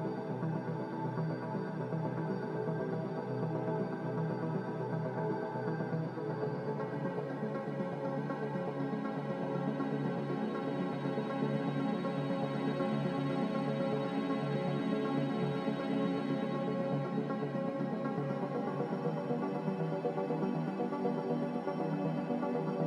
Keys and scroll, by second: 2.4 2, 22.4 0.